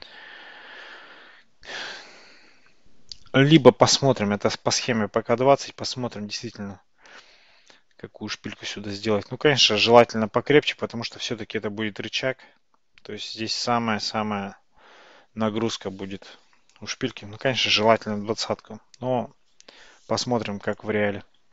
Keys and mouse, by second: 3.7-7.8 middle drag, 20.7 click.